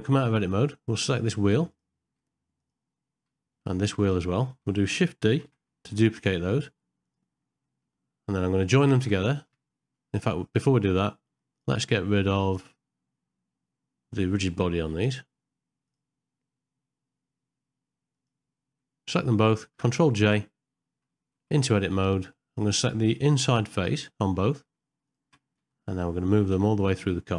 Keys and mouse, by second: 1.7 click, 2.6 click, 4.0 shift+click, 5.5 shift+d, 7.7 middle click, 15.0 click, 18.2 click, 20.3 ctrl+j, 21.5 Tab, 22.2 middle click, 23.6 3.